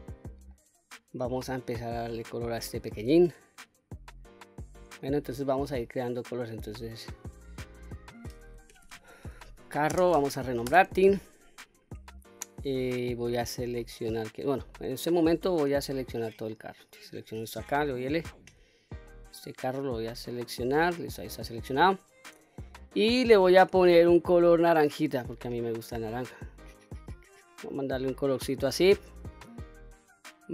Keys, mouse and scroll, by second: 0.0 scroll down 1, 0.3-1.3 middle drag, 2.0-2.5 scroll down 1, 2.5-3.1 middle drag, 3.5-4.1 scroll up 3, 4.1 middle click, 7.3-11.6 drag, 9.1 r, 13.2-14.5 middle drag, 14.9-15.7 scroll down 1, 15.7 middle click, 16.5 click, 17.6 l, 18.9-21.4 middle drag, 22.8 click.